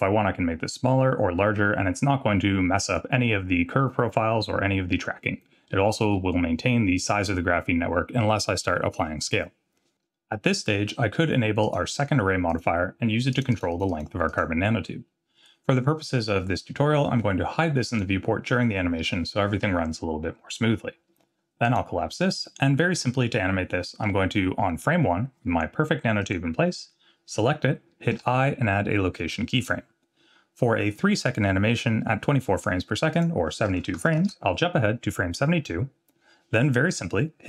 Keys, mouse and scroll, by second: 5.7-6.3 scroll up 5, 11.6 click, 12.5 click, 13.3 click, 13.5 click, 13.7 click, 13.9 click, 14.3 click, 17.9 click, 21.6 click, 26.2 click, 28.1 i, 33.1-35.0 drag, 36.1-36.6 scroll down 2.